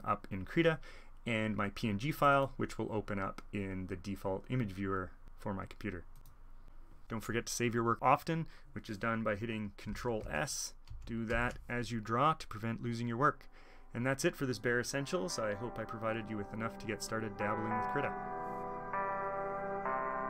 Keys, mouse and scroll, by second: 2.1-3.8 drag, 6.1 click, 6.6-9.1 drag, 10.3 ctrl+s, 10.8 ctrl+s.